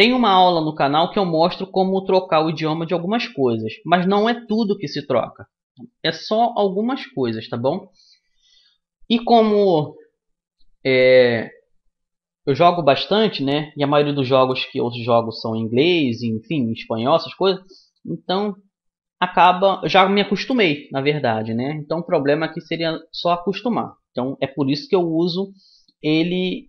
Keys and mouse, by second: 2.5 a, 3.8 Tab, 18.2-21.4 right drag, 20.4-21.4 drag, 21.2 middle click, 22.2-25.2 drag, 25.2 middle click, 26.4 right click.